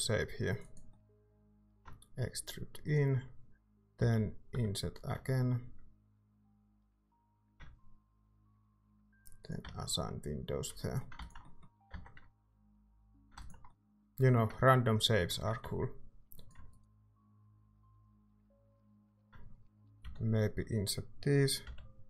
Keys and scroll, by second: 0.9 i, 1.6 e, 4.0-4.5 typing, 7.4 e, 9.6 Tab, 10.5 a, 11.2 ctrl+s, 11.9 Tab, 12.8 a, 13.3 ctrl+s, 15.6 Tab, 20.0 i, 21.6 i.